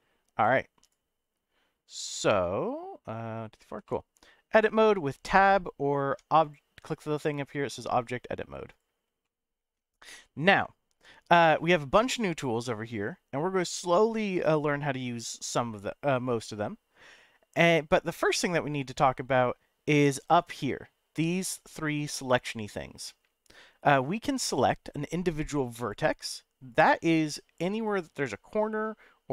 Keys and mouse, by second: 3.8 middle click, 6.1 Tab, 6.4-8.8 drag, 9.2 middle click, 24.5 click, 25.8 click, 26.7 click, 27.8 click, 28.3 middle click.